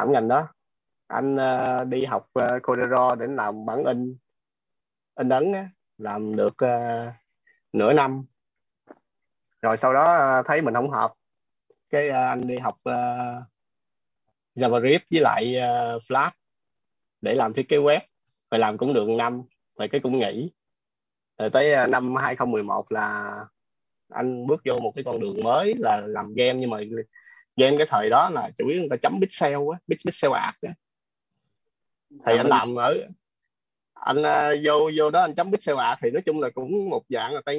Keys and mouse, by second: 0.0-0.7 typing, 2.0-3.3 typing, 5.5-9.2 typing, 19.5-22.4 typing, 23.6 ,, 23.9 space.